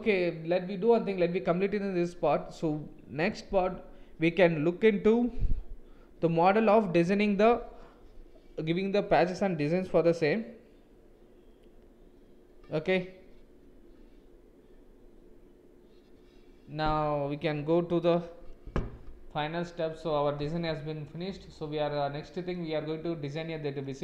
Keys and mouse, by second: 21.9 middle click, 23.2 middle click.